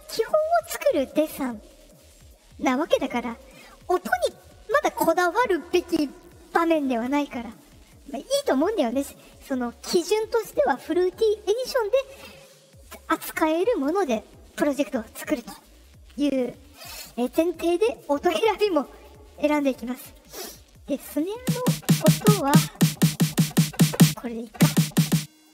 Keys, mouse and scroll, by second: 15.4 click, 16.6 click, 18.8 click, 25.3 click.